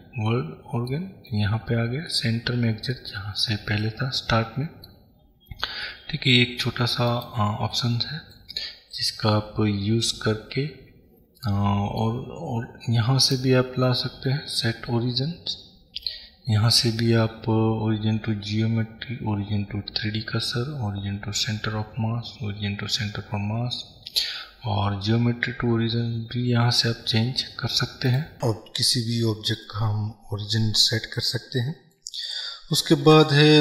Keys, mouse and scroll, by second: 0.4 middle click, 1.2-2.4 scroll up 2, 2.4-7.2 middle drag, 3.2-4.0 scroll down 2, 5.4-6.0 scroll down 2, 7.2 click, 7.8-32.3 middle drag, 32.3 click, 33.2 Delete.